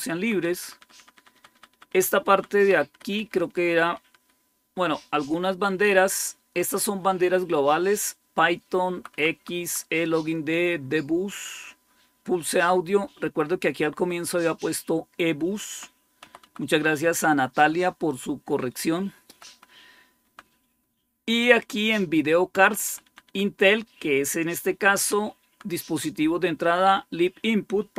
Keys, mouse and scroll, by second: 0.0 Down, 0.3 Down, 0.5 Down, 0.8 Down, 1.0 Down, 1.2 Down, 1.4 Down, 1.6 Down, 1.8 Down, 2.2 Down, 2.6 Up, 2.8 Up, 3.0 Up, 3.3 Up, 3.5 Up, 3.7 Up, 5.2-6.2 Left, 8.8 Right, 9.0 Right, 9.2 Right, 9.5 Right, 11.5-12.4 Right, 12.7 Right, 15.5 Left, 16.1 Right, 16.3 Right, 19.2 Right, 19.4 Right, 20.1 Down, 22.4 Left, 22.7 Left, 22.9 Left, 23.1 Left, 24.8 Down, 25.3 Down.